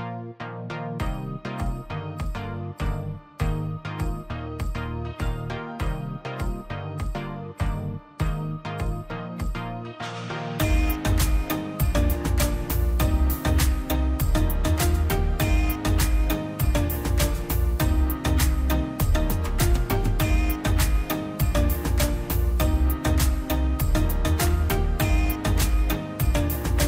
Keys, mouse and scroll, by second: 0.0-1.0 scroll down 1, 1.5-2.2 scroll up 1, 2.3 ctrl+z, 6.1 click, 6.7-7.6 scroll down 1, 8.3 click, 8.6-9.0 scroll up 1, 9.8 click, 10.0 scroll down 1, 10.7 scroll up 1, 12.1 click, 12.3-12.9 scroll down 1, 13.1 click, 13.7 scroll up 1, 13.9 click, 14.9 scroll down 1, 16.1 ctrl+click, 16.9 click, 17.1 scroll up 1, 17.7 click, 17.8-18.2 scroll down 1, 20.1 scroll up 1, 22.0 click, 24.0 click, 24.1 ctrl+z, 24.4 scroll down 1, 26.1 click, 26.2-26.8 scroll up 1, 26.8 click.